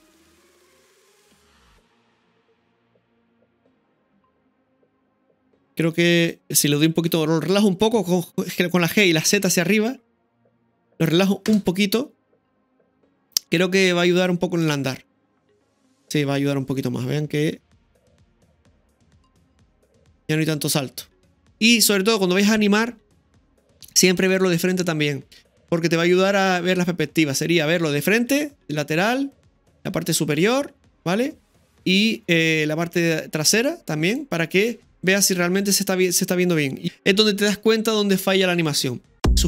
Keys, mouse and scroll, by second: 6.2-7.9 right drag, 7.9 g, 12.9 i, 14.2 click, 14.7 space, 16.4 middle click, 21.3-22.2 scroll down 1, 23.9-25.1 middle drag, 28.4-29.2 middle drag, 29.5-30.5 middle drag, 34.2-36.7 middle drag.